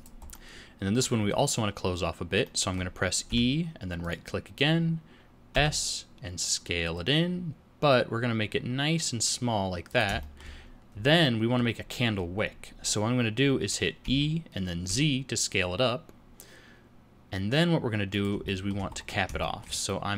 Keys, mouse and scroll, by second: 0.3 middle click, 2.4 middle click, 3.2 e, 6.0 s, 10.2 shift+middle click, 10.6-11.2 scroll up 2, 11.2 middle click, 14.0 e, 18.4 shift+middle click, 18.9-19.2 scroll up 3, 19.4 shift+middle click, 19.8 middle click.